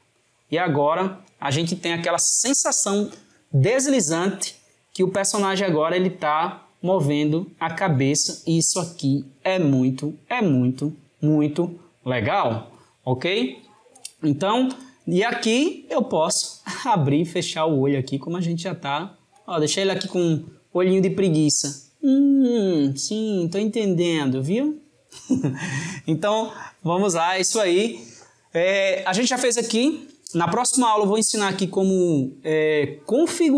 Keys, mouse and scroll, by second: 14.5 drag, 15.4 click, 20.0 click, 20.7 click.